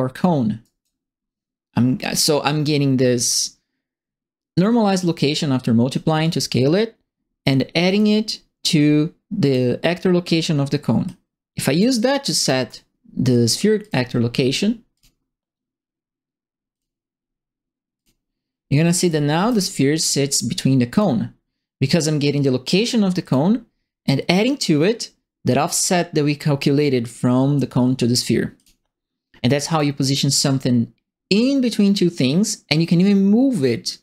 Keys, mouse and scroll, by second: 0.6 right click, 5.3 click, 6.2 click, 7.8 click, 9.4 click, 11.0 click, 12.4 click, 13.8 click, 14.9 click, 16.7 click, 17.9 click, 19.0 right click, 19.0 d, 19.4 s, 20.9 click, 23.2 click, 28.5 click, 29.7 click, 31.3-34.0 drag.